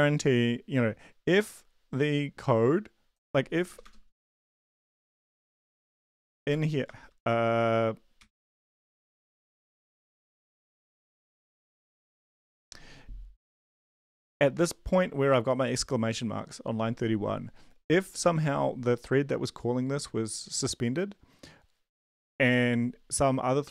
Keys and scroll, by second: 3.7 Return, 3.8 Return, 4.2-6.5 typing, 7.9-13.1 typing.